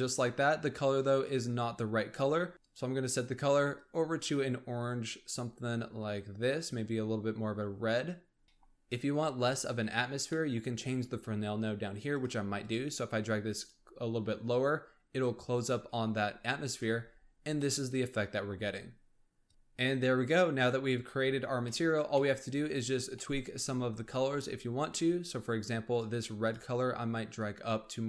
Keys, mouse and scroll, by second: 0.4-0.8 scroll up 4, 0.8 scroll down 1, 1.0-2.4 scroll up 1, 2.4 scroll up 1, 2.5 click, 8.4-10.7 middle drag, 10.7-12.2 scroll up 3, 12.2-14.9 drag, 14.9-16.5 scroll down 4, 16.5 scroll up 3, 16.7 scroll down 1, 16.8 z, 17.5-18.6 middle drag, 18.6-19.4 scroll up 2, 19.4 click, 21.6 middle click, 22.5-23.1 scroll up 4, 23.1 middle click, 23.4-24.9 scroll up 4, 24.9 scroll up 3, 26.0 click.